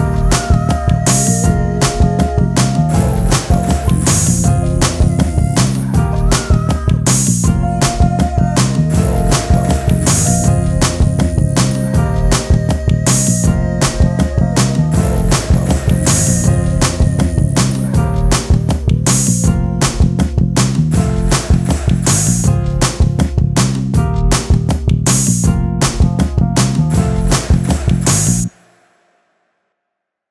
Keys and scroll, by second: 1.2 ctrl+space, 3.5 space, 4.3 t, 18.4 e, 24.8 ctrl+space, 27.0 ctrl+v, 29.1 t.